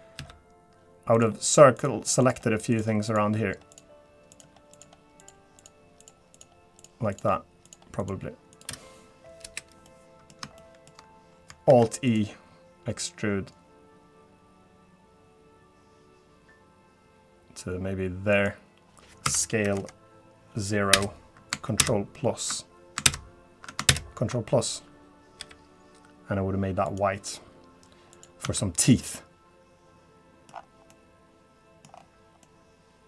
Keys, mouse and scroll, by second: 0.2 c, 9.9 middle click, 10.6 shift+middle click, 11.7 alt+e, 22.4 ctrl+KP_Subtract, 22.4 ctrl+KP_Add, 23.6 ctrl+KP_Subtract, 23.6 ctrl+KP_Add, 25.9 g, 28.1 click, 28.9 Tab, 29.0 middle click, 30.5-30.9 scroll down 5, 31.0 middle click, 31.9-32.4 scroll up 5, 32.4 middle click.